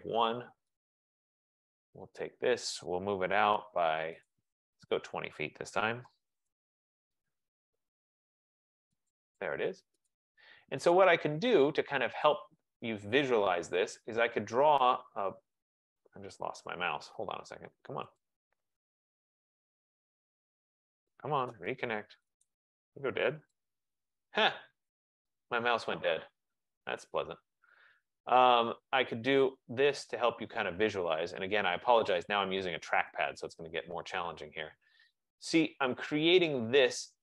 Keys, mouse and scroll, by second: 0.9 click, 2.3 click, 3.1-4.8 typing, 4.4 click, 5.8 F15, 6.1-7.7 typing, 9.4-10.1 typing, 10.2 click, 12.4 click, 28.7 click, 30.4 click, 32.3 click, 33.3 Return, 36.3 click.